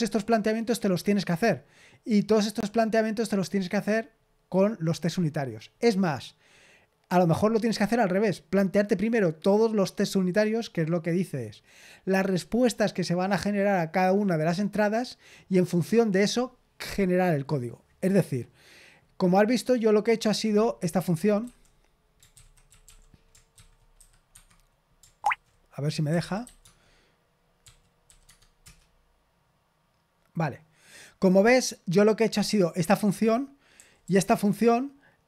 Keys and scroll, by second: 21.4 v, 22.3 ctrl+c, 22.8 typing, 23.5 ctrl+c, 23.9 q, 24.2 Escape, 25.2 ctrl+c, 25.8-28.0 typing, 28.2 Tab, 28.5 Return, 32.4-33.7 typing.